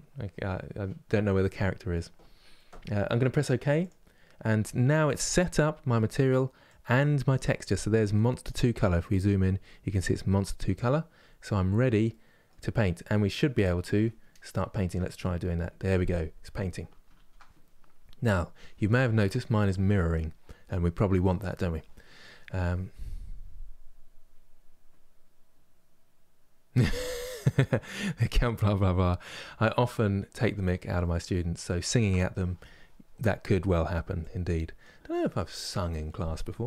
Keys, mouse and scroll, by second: 6.5 click, 7.5 click, 14.6-16.9 drag, 16.9 ctrl+z, 30.7-33.9 shift+middle drag, 33.9-36.6 drag.